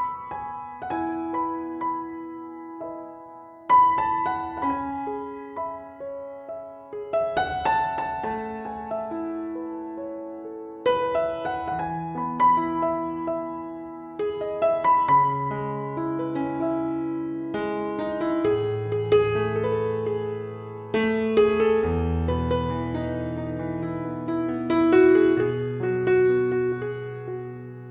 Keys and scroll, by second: 6.3 ctrl+z, 7.5 ctrl+z.